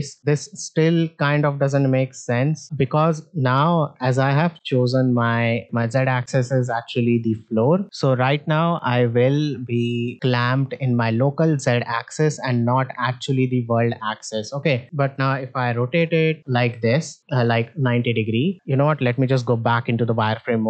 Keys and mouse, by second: 0.9 click, 2.2 alt+r, 6.8 middle drag, 8.1-9.2 drag, 10.0-11.6 drag, 12.3 middle drag, 13.1-14.3 drag, 14.7 middle drag, 15.7 r, 18.8 z, 19.8 shift+middle drag, 20.3-20.6 middle drag.